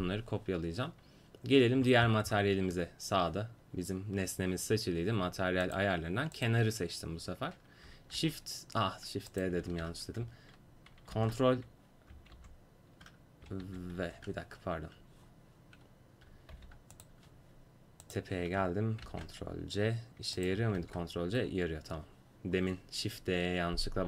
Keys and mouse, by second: 2.0-5.7 middle drag, 5.7-8.2 drag, 8.2 shift+d, 9.9 ctrl+z, 11.2 ctrl+v, 12.4 ctrl+v, 16.6 g, 18.1-19.1 drag, 19.1 ctrl+c, 20.4-22.3 drag, 20.8 ctrl+v.